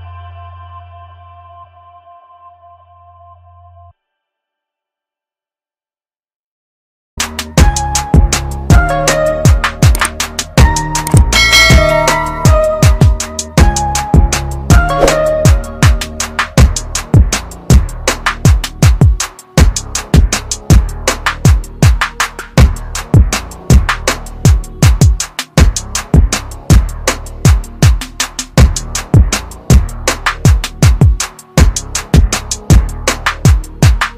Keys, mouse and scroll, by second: 4.9 click, 12.3 Delete, 14.3 click, 15.2 Delete, 15.6 click, 20.4 Delete, 23.2 click, 29.5 Delete, 30.4 click.